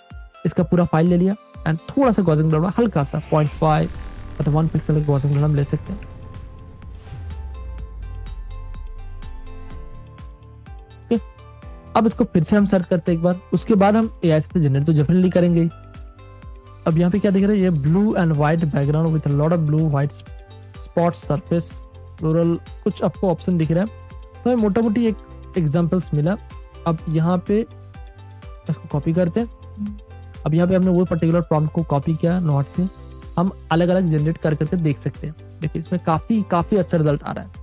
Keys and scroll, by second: 0.6 super+space, 0.9 super+space, 3.4 5, 4.1 BackSpace, 4.7 1, 5.3 Return, 6.0 super+space, 7.3 super+space, 8.2 space, 8.7 Return, 8.8 super+space, 9.1 ], 10.3 super+space, 11.7 a, 12.3 super+c, 13.3 super+Tab, 28.8 super+Caps_Lock, 28.9 c.